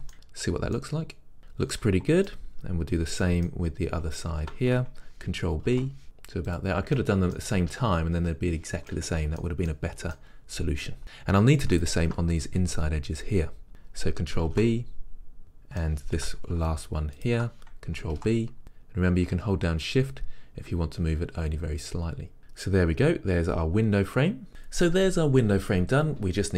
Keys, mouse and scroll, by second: 0.2 Tab, 0.6 scroll down 2, 0.9 middle click, 1.2-4.4 middle drag, 1.4 Tab, 2.8-3.4 scroll up 2, 4.4 alt+click, 5.8 ctrl+b, 6.8 click, 7.2-12.0 middle drag, 12.0 alt+click, 14.6 ctrl+b, 15.4-17.4 middle drag, 17.4 alt+click, 18.4 ctrl+b, 22.4-26.5 middle drag.